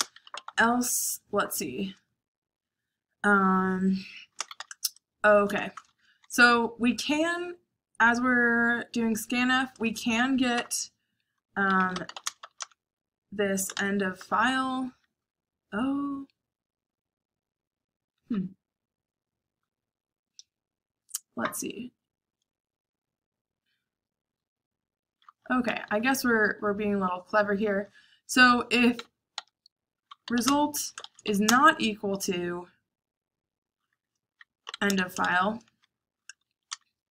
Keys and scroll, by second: 0.0-0.9 typing, 4.3-5.8 typing, 9.9-14.9 typing, 25.6 BackSpace, 26.1 BackSpace, 26.3 BackSpace, 26.4 BackSpace, 28.9-31.7 typing, 34.4-37.1 typing.